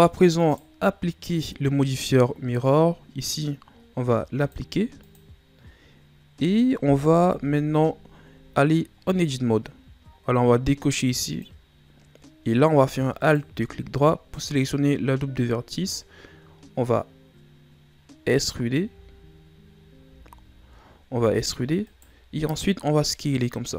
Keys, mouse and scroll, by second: 0.4 right click, 1.2 middle click, 1.8-2.4 scroll up 2, 4.4-7.3 drag, 7.3 KP_7, 8.6-9.0 ctrl+scroll up 2, 9.0 Tab, 9.5 scroll down 2, 11.2 click, 13.2 alt+right click, 15.2-18.2 ctrl+scroll down 2, 18.2 z, 18.8 z, 20.4 z, 21.2 e.